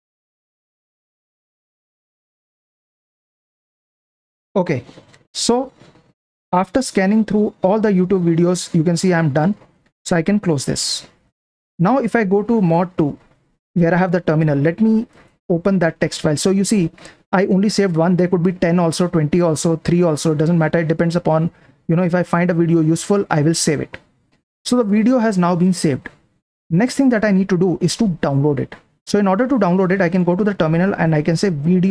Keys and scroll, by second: 1.5 Down, 3.4 Down, 10.6 super+w, 12.6 super+2, 15.1 ctrl+shift+y, 30.6-31.8 typing.